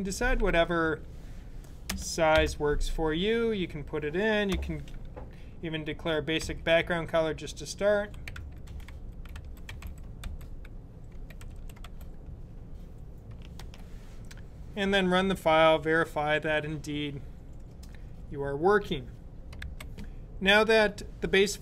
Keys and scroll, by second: 0.6 typing, 1.7-2.2 typing, 6.3 typing, 7.8-12.1 typing, 13.4 super+b.